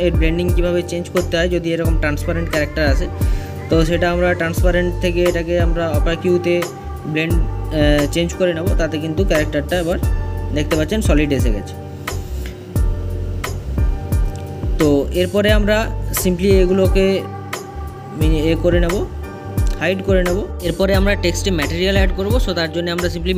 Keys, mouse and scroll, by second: 17.8-18.9 scroll down 1, 18.9-23.3 middle drag.